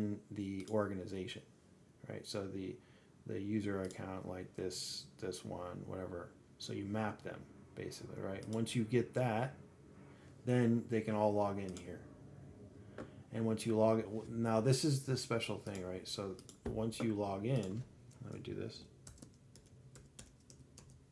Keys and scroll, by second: 1.6 alt+a, 9.2 alt+a, 12.5 alt+a.